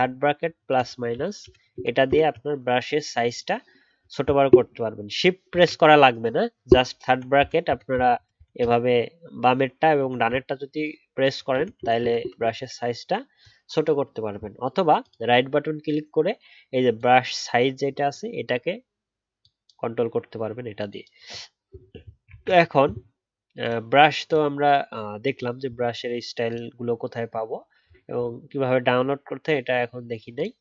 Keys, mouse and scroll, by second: 0.0-2.0 typing, 5.5 ctrl+z, 22.3 ctrl+z.